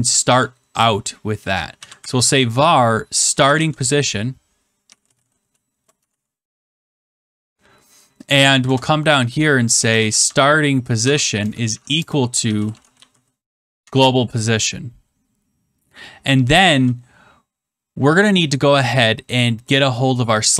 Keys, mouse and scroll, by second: 1.5-6.5 typing, 8.2 click, 8.6 Return, 9.6-13.5 typing, 13.8 Tab.